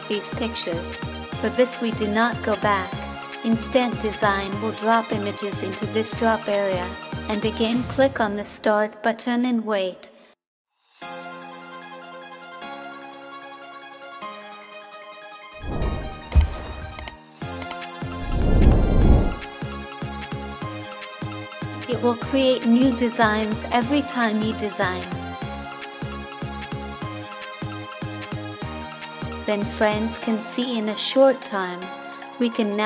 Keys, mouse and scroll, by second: 31.5 ctrl+=.